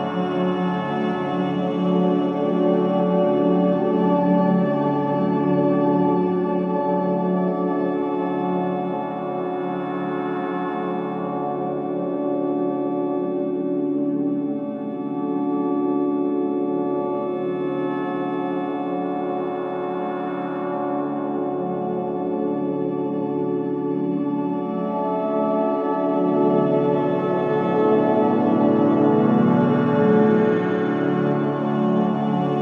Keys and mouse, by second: 0.0-0.3 typing, 1.7-2.9 drag, 2.9-3.4 typing, 4.2-7.3 drag, 6.2-7.5 typing, 8.3 click, 11.7 ctrl+z, 12.4 ctrl+z, 14.3 i, 14.9 click, 16.1 click, 17.3 click, 17.5 typing, 18.2 click, 19.2 typing, 20.4-21.4 drag, 21.7 typing, 23.3 space, 24.5-26.6 drag, 27.7 click, 27.9 click, 28.5 typing, 29.1 click, 29.7 alt+click, 30.7 alt+shift+click, 31.3-32.5 ctrl+alt+drag.